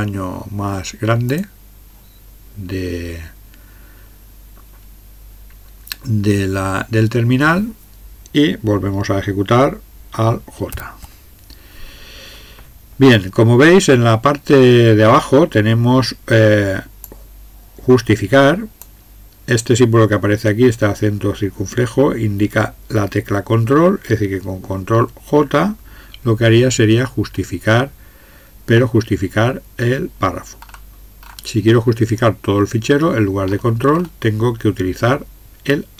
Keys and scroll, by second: 10.7 alt+j.